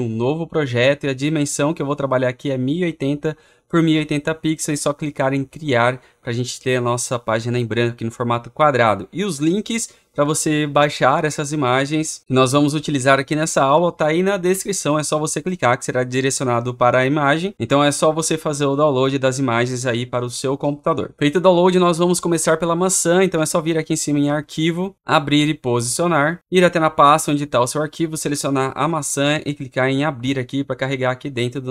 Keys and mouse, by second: 6.0 click, 28.0 click, 29.0-31.7 drag.